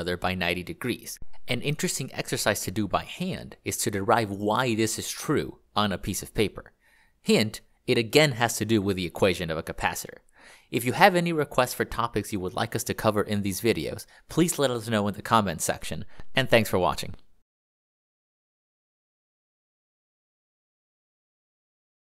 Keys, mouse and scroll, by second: 6.8-9.3 ctrl+d, 16.4 click, 19.2 ctrl+click.